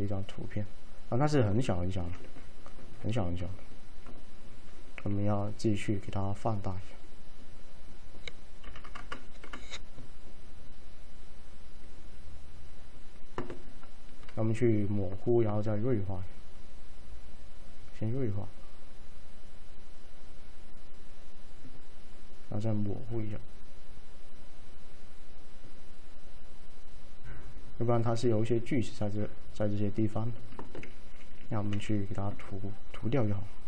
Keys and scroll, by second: 10.5 typing.